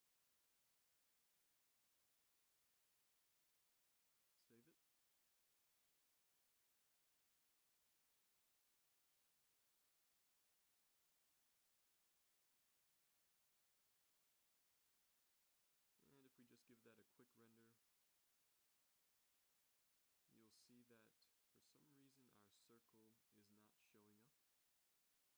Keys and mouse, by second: 1.6 ctrl+c, 2.2 ctrl+v, 3.1 ctrl+v, 4.2 ctrl+s, 13.7-16.1 drag, 17.2 shift+z, 20.6-21.4 Right, 21.6 Right.